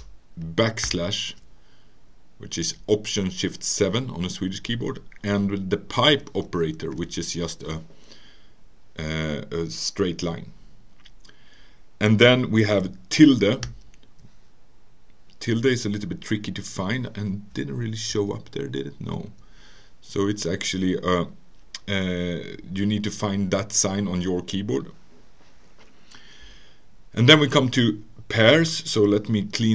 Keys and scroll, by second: 0.8 alt+shift+/, 6.4 Return, 7.0 alt+7, 12.2 Return, 19.2 alt+BackSpace.